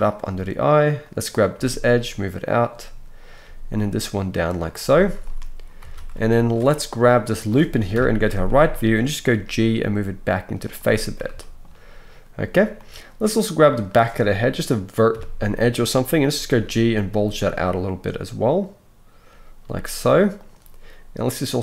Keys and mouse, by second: 1.0-1.5 middle drag, 1.5-3.2 right drag, 1.5 g, 3.2 middle click, 3.2-6.3 right drag, 3.4 g, 5.8 alt+a, 6.3 alt+shift+middle click, 6.5-8.5 alt+shift+right drag, 7.9 KP_3, 8.5-21.6 shift+drag, 9.3 g, 15.1 KP_3, 16.2 g.